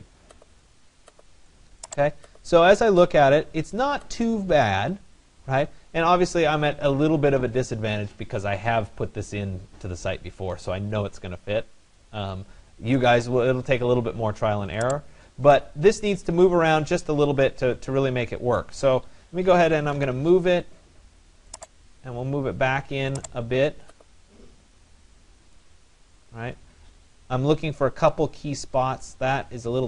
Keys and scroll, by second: 19.6 Return, 26.2 Escape.